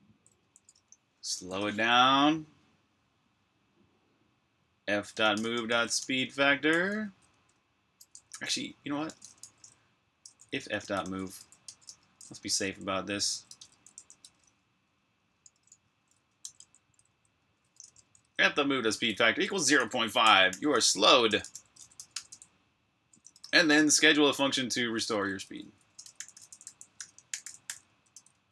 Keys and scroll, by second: 0.1-1.6 typing, 4.7-7.1 typing, 8.1-13.7 typing, 15.2-21.8 typing, 22.9-28.5 typing.